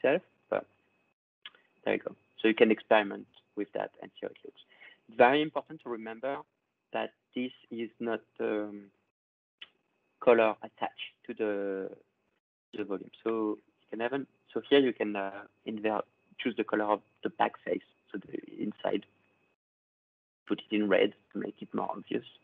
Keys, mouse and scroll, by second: 0.0 click, 0.0 scroll, 0.5 click, 1.6 click, 2.4 click, 3.8 click, 4.3 click, 7.0 click, 7.8 click, 8.6 click, 10.1 click, 10.8 click, 11.7 click, 12.6-13.5 ctrl+scroll, 15.0 click, 18.0 click, 18.2 click, 19.6 click, 20.3 click, 21.5 click, 21.8 click.